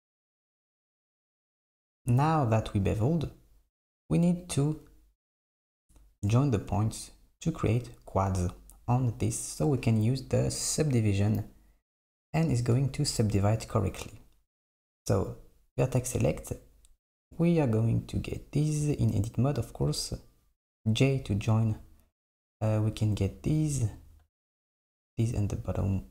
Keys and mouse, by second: 4.5 click, 6.2 KP_7, 17.5 click, 20.6 j, 22.5 click, 25.7 shift+click.